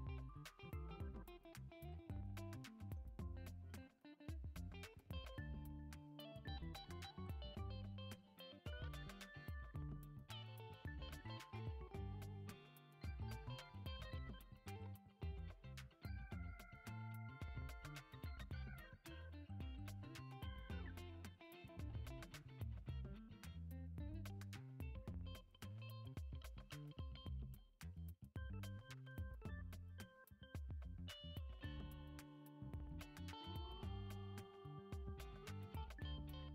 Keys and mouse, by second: 0.1 shift+right click, 0.3 shift+a, 2.0 s, 3.5 middle drag, 4.5 KP_7, 5.3 g, 6.8 middle drag, 7.4 Tab, 8.1 shift+middle drag, 9.6 e, 11.7 e, 12.8 e, 13.6 e, 15.1 e, 16.1 e, 17.5 e, 18.7 s, 20.1 e, 21.2 e, 22.3 e, 23.7 e, 24.8 e, 25.9 s, 26.6 e, 27.8 s, 29.2 e, 30.5 e, 31.7 e, 33.2 e, 34.7 m, 35.9 a.